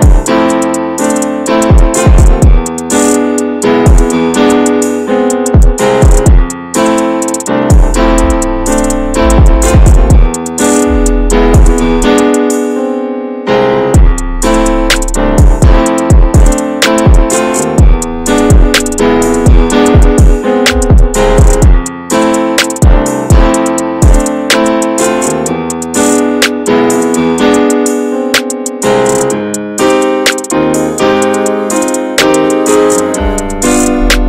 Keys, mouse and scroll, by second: 0.5 click, 1.4 s, 2.7 s, 5.8-7.1 middle drag, 7.1 ctrl+click, 7.5-8.9 alt+middle drag, 8.9 s, 11.4 alt+z, 11.5 scroll down 2, 11.8 middle click, 12.1 Tab, 12.5 alt+z, 13.0 alt+z, 13.6-14.1 drag, 14.1 scroll down 1, 14.3 middle click, 14.5 drag, 14.8 Tab, 15.3 shift+middle click, 15.5 a, 15.8 a, 16.0 click, 17.7 ctrl+a, 18.7 click, 19.1 Tab, 19.4 click, 19.9 Tab, 20.3 a, 20.8 a, 21.1-21.9 right drag, 21.9 scroll up 1, 22.2 middle click, 22.8 scroll up 1, 23.0 middle click, 23.8-24.6 scroll up 4, 23.9 shift+middle click, 24.6 middle click, 25.0 Tab, 25.4-25.7 middle drag, 25.7 scroll up 1, 26.1-26.5 shift+middle drag, 26.5 Tab, 26.9 middle click, 27.7 alt+z, 28.1 scroll down 2, 28.3 shift+middle click, 29.2 2, 30.1 alt+shift+click, 31.0-32.6 middle drag, 32.6 alt+shift+click, 33.1 middle click, 33.8 ctrl+click.